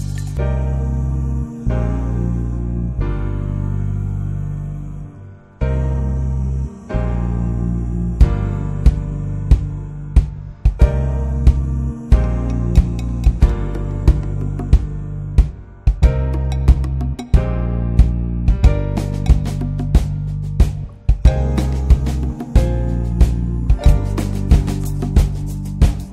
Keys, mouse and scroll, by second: 3.6 click, 3.9 Delete, 4.5-11.3 drag, 12.8 click, 13.9-15.8 drag, 15.8-16.5 scroll down 1, 16.5 middle click, 16.6-17.0 scroll up 1, 17.0 middle click, 17.5 scroll down 1, 18.0-22.0 middle drag, 22.0 click, 24.3-26.1 drag.